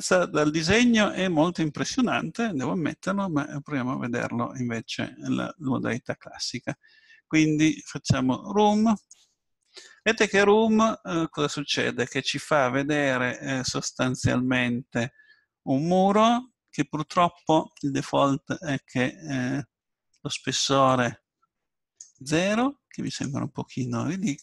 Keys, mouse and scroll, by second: 4.1-6.7 middle drag, 6.7-8.6 drag, 9.0-10.7 drag, 16.2-20.9 middle drag, 20.9-22.6 drag, 23.1-24.4 drag.